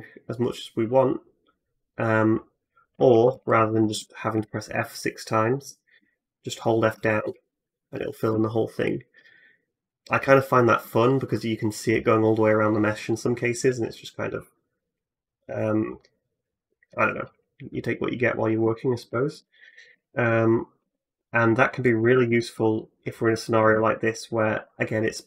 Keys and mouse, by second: 2.9 ctrl+z, 3.1 ctrl+z, 3.3 ctrl+z, 3.5 ctrl+z, 3.8 ctrl+z, 4.2 ctrl+z, 5.8-6.7 f, 6.4-19.5 drag, 19.5 middle click, 19.6-21.6 shift+drag, 20.6 Tab, 21.6 middle click, 21.7-24.4 drag, 21.8 Tab, 24.9 click.